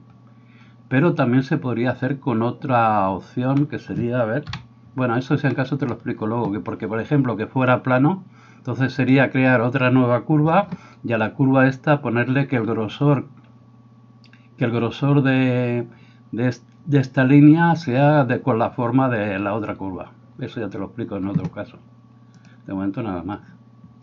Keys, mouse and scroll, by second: 4.5 KP_7.